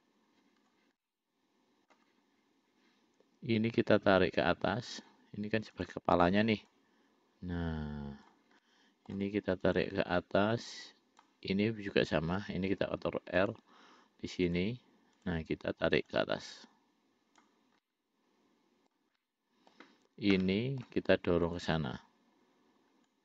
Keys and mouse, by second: 1.3 middle click, 5.2 click, 6.0 click, 7.0-8.6 drag, 8.9 middle click, 9.9 click, 11.2 click, 13.1 ctrl+r, 15.5 click, 16.4-17.8 drag, 18.2-19.2 middle drag, 19.4 middle click, 20.7 middle click, 21.7 click.